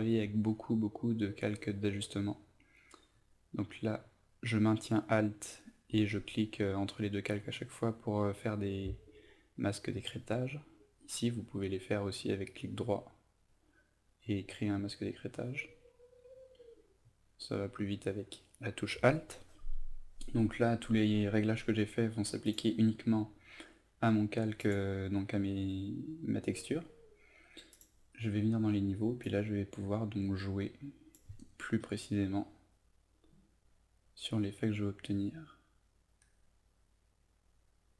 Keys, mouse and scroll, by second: 1.4 alt+click, 2.2 alt+click, 3.1 alt+click, 3.9-8.1 alt+drag, 9.2-10.2 right drag, 11.3 click, 12.3 right click, 14.3 click, 15.6 alt+click, 16.3 alt+click, 17.0 alt+click, 18.1 alt+click, 22.4-37.9 drag.